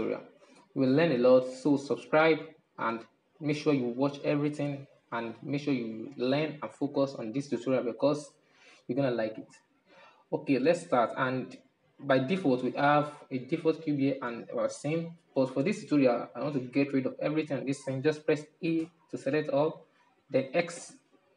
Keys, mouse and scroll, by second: 1.2-3.3 drag, 5.0 click, 6.0 click, 7.0 drag, 8.0 click, 9.8-14.4 middle drag, 14.8-18.6 shift+middle drag, 18.9 a, 20.9 x.